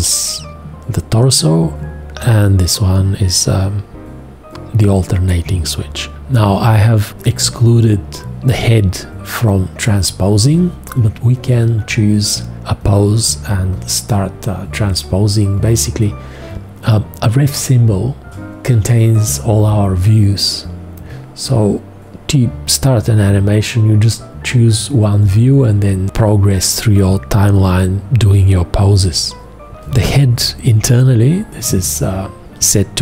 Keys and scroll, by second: 30.0 v.